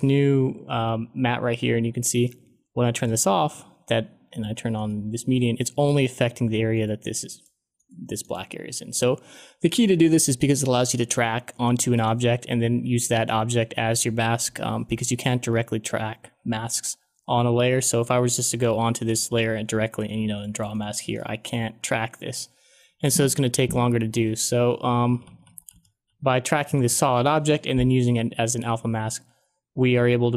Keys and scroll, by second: 24.6 ctrl+z, 25.0 ctrl+z.